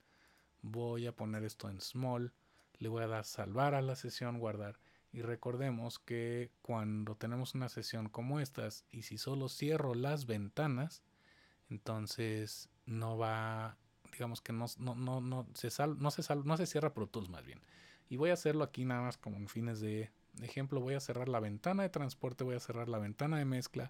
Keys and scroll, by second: 2.3 super+s.